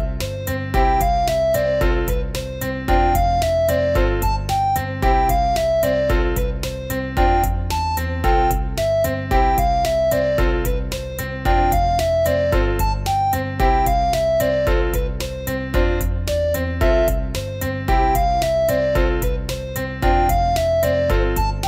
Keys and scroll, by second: 0.8 0.